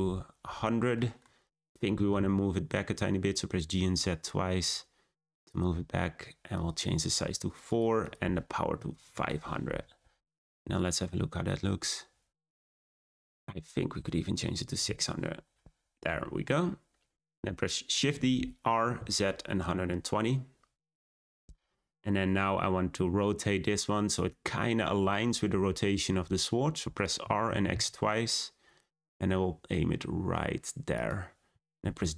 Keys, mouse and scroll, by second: 0.9 middle click, 1.3-1.8 scroll down 2, 1.8 g, 6.5-7.7 drag, 8.0-9.0 drag, 9.0 0, 13.1-14.8 drag, 14.8 0, 17.9 shift+d, 21.8-22.1 scroll down 2, 22.9-25.9 scroll down 1, 27.1 r, 31.4 g.